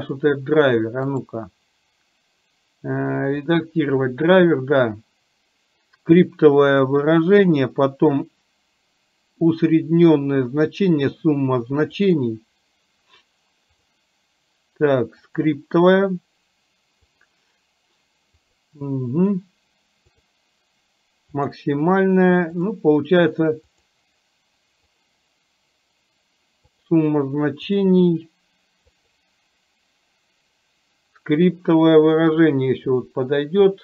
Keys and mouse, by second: 1.1-33.6 right drag.